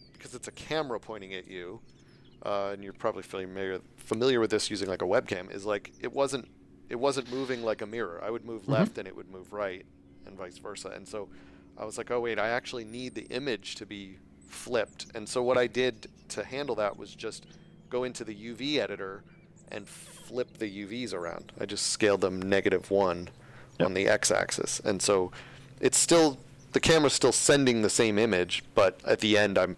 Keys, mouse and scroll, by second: 15.6 right click.